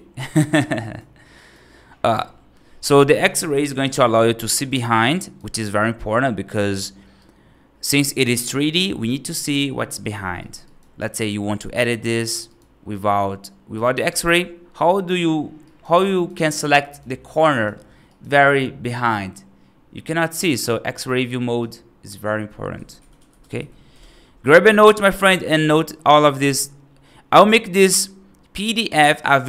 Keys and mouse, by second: 0.3 right drag, 0.7 right drag, 1.3 right drag, 4.4 right click, 5.0 right drag, 7.1-7.7 right drag, 10.2 right click, 10.5 right click, 10.8 F3, 12.1 click, 12.4 right click, 13.7 click, 14.0 right click, 15.5 right click, 15.8 right click, 16.6 right click, 17.3 right click, 17.9 right click, 18.2 g, 21.5 click, 22.1 click, 25.4 right click.